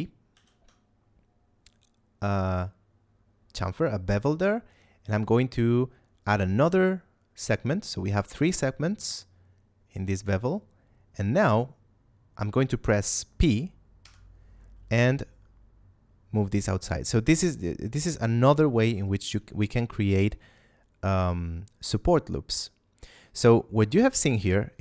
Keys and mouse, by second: 0.3 ctrl+b, 13.9 p, 17.2 click, 18.7 middle click, 19.1 Tab, 19.9 middle click, 20.5 shift+middle click, 24.3 middle click.